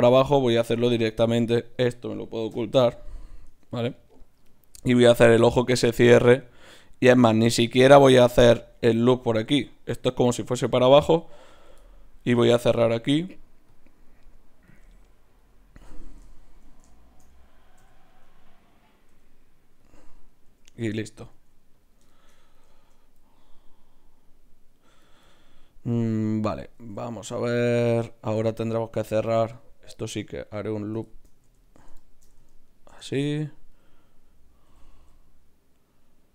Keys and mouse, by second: 1.3 Tab, 1.6-5.8 drag, 2.5 h, 3.4 Tab, 11.5-17.6 right drag, 17.0-24.5 drag, 17.8 f, 19.1 g, 20.4 g, 21.3 g, 24.6-26.4 drag, 25.0-26.4 right drag, 26.4 middle click, 26.7 ctrl+Tab, 28.4-30.1 middle drag, 31.0 middle click, 31.6-34.4 right drag, 33.3-34.4 drag, 34.4-36.3 middle drag, 34.6 e.